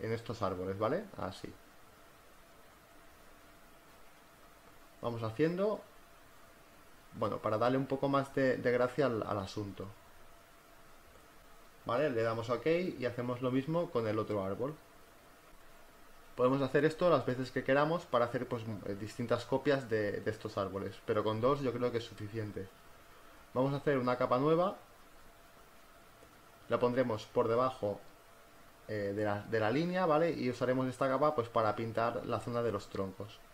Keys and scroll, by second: 16.3 b, 16.8 space, 22.5 ctrl+alt+z, 27.9 ].